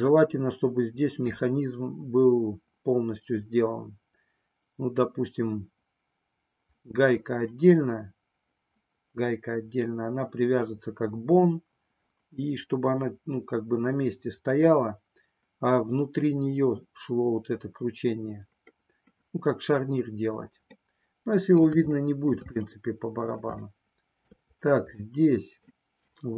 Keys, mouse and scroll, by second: 21.0 middle click, 22.2 shift+middle click, 22.7 middle click, 23.8 shift+middle click, 25.1-26.3 middle drag.